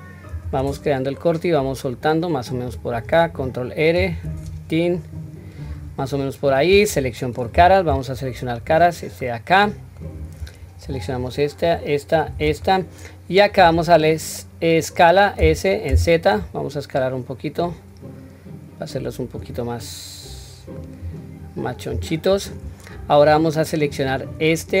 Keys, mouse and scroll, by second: 6.1 middle click, 7.5 3, 8.7 click, 9.2-10.0 middle drag, 11.0 shift+click, 11.6 shift+click, 12.1 shift+click, 12.6 middle click, 15.4 s, 19.8-20.7 middle drag, 21.0-21.4 scroll down 1, 21.9-22.4 scroll down 2, 22.5-23.2 middle drag, 22.5 scroll up 2, 23.9 click.